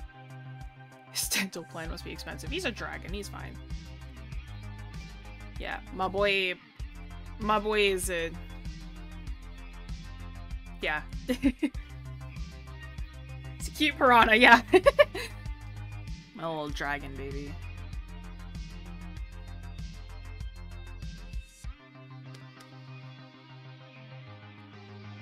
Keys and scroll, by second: 15.2 scroll down 1, 15.9 scroll up 1.